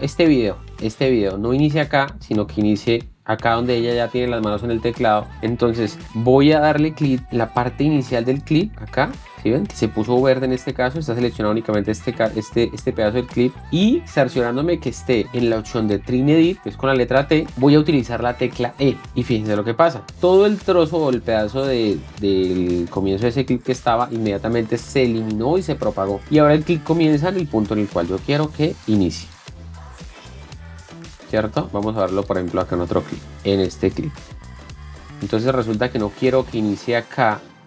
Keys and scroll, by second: 17.5 t, 20.2 e, 30.0 space.